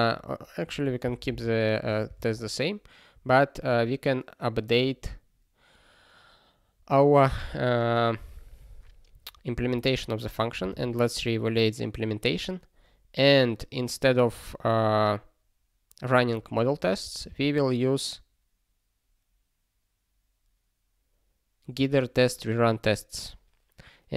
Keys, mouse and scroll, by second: 0.6 click, 1.0 ctrl+b, 1.3 ctrl+alt+k, 1.8 BackSpace, 2.1 ctrl+s, 3.6 ctrl+n, 9.3 ctrl+p, 9.6 ctrl+e, 10.7 ctrl+e.